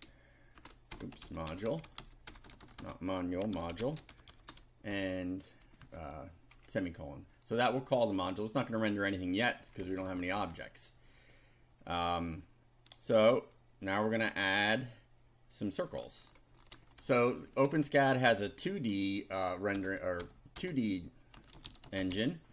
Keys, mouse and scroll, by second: 0.0-4.9 typing, 5.8 Down, 6.6 Delete, 9.7 Down, 16.7 ctrl+r, 17.0 ctrl+Return, 17.5 ctrl+Tab, 18.3 BackSpace, 19.7 BackSpace, 21.2-22.5 typing.